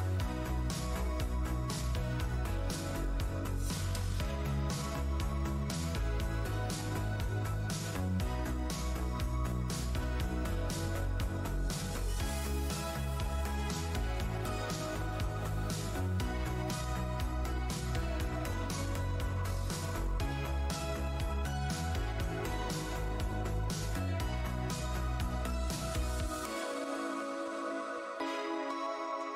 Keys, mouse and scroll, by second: 0.5-2.8 typing, 0.8 scroll down 1, 2.8 Tab, 2.9 click, 4.9 Tab, 5.7 Tab, 6.5 alt+Tab, 7.2 click, 8.1 Tab, 9.3 alt+click, 9.7 alt+Tab, 12.4 shift+Tab, 13.4 click, 14.7 Tab, 14.7 0, 14.9 Return, 15.7 alt+click, 16.2 e, 17.3 click, 19.0 w, 19.8 click, 20.1 scroll down 1, 21.2 shift+click, 21.5-22.0 scroll down 1, 22.0 Delete, 22.6 right click, 22.8 f, 24.2 alt+scroll, 24.5 click, 24.6 alt+click, 26.1 shift+right click, 26.2 alt+scroll down 1, 27.6-28.9 alt+scroll, 28.9 r.